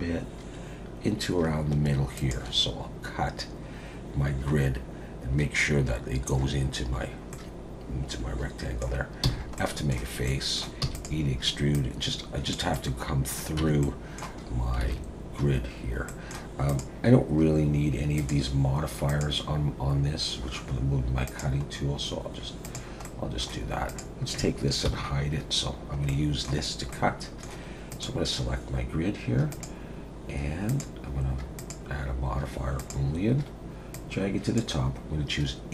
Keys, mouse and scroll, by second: 7.1 scroll down 1, 7.3 middle click, 9.2 f, 9.6 middle click, 10.3 middle click, 10.8 e, 11.7 click, 12.7 middle click, 13.6 Tab, 13.8 middle click, 14.4-14.8 scroll up 3, 14.8 alt+a, 16.1 middle click, 16.7 click, 18.2 click, 19.1 click, 21.2 click, 21.6-22.6 scroll down 5, 22.6 click, 23.0 middle click, 23.9 click, 24.9 h, 25.7-26.1 scroll down 2, 26.1 middle click, 26.9 middle click, 27.9 click, 29.5 click, 30.7 click, 31.6 click, 33.9 click.